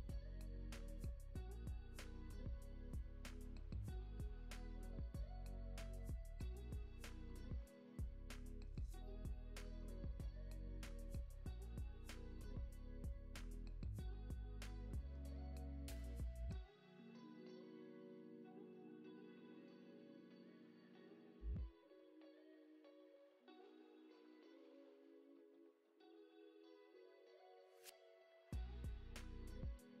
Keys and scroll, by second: 4.1 super+z, 9.7 z, 10.9 x, 11.3 space, 16.3 space.